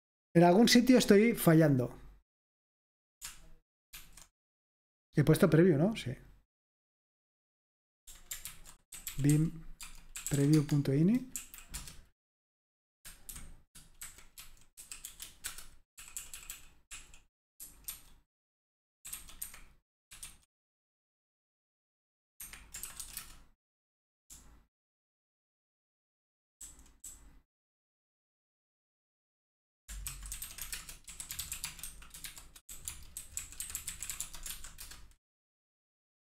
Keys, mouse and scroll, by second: 4.0 alt+super+r, 8.5 ctrl+c, 9.0-10.8 typing, 11.4 Right, 11.7 Return, 13.8-16.5 typing, 17.6-20.6 typing, 22.4 Escape, 22.6-25.4 typing, 26.8-28.0 typing, 30.2-35.0 typing.